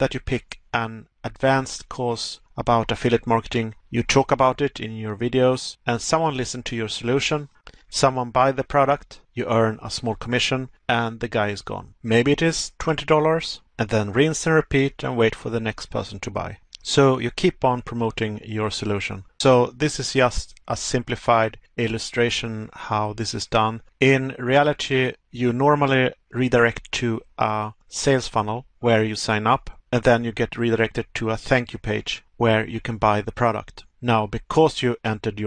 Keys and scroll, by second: 2.5 Pause, 10.8 Pause, 12.5 Pause, 15.4 Pause, 22.4 Pause, 27.6 Pause, 31.7 Pause, 33.6 Pause.